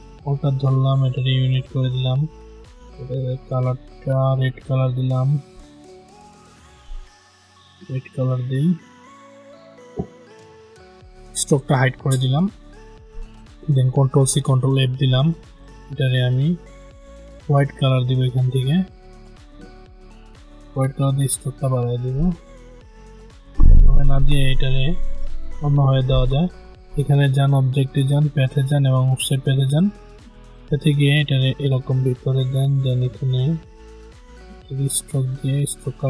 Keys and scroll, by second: 14.0 ctrl+c, 14.3 ctrl+f.